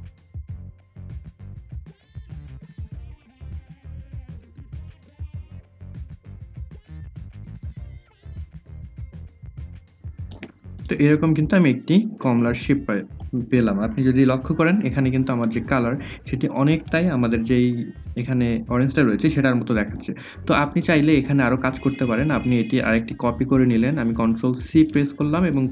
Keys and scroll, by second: 3.3 ctrl+c, 3.4 ctrl+f, 3.6 ctrl+z, 3.8 ctrl+c, 4.0 ctrl+f, 8.5 ctrl+g, 23.3 ctrl+c, 25.1 ctrl+f.